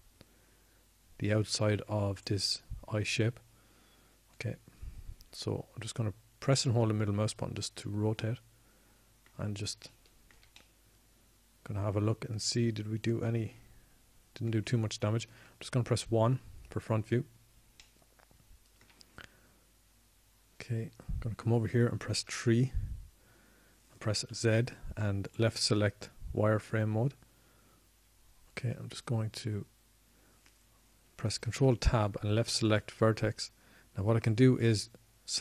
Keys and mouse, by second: 9.6-11.1 middle drag, 13.4-15.1 middle drag, 16.5-18.6 middle drag, 18.9 KP_1, 25.6 KP_3, 26.0 KP_3, 27.7 z, 28.7 z, 34.8 ctrl+Tab.